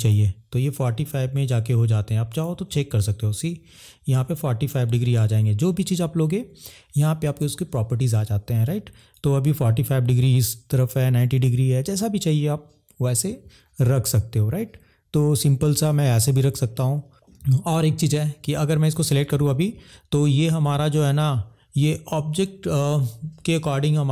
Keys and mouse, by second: 9.2 click, 16.6 middle click, 18.8 click.